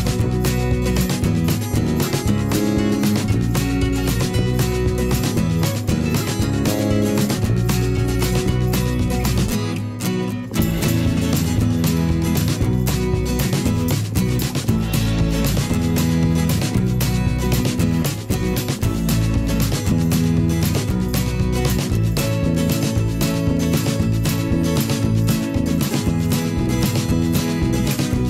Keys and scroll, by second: 24.2 g, 25.8 v, 26.8 g, 27.6 v, 28.1 g.